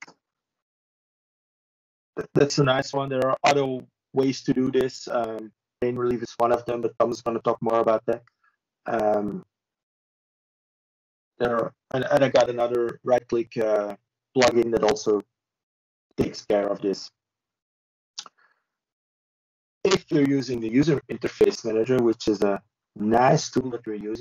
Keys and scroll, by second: 9.0 ctrl+space, 9.6 ctrl+g, 23.4 ctrl+space.